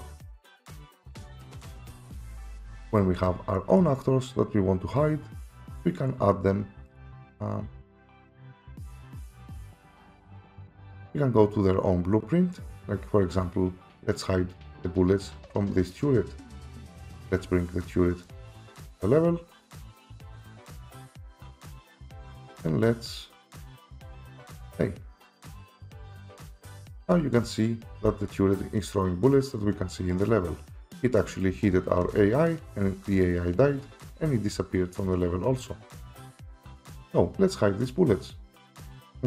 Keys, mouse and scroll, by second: 1.3 Escape, 7.0 click, 8.9 click, 16.4 typing, 17.1 click, 18.3 click, 20.0 click, 21.9 click, 24.8 click, 26.2 click, 26.2-28.0 typing, 30.5-32.8 typing, 33.8-34.2 typing, 35.7-36.5 typing, 38.7 Escape.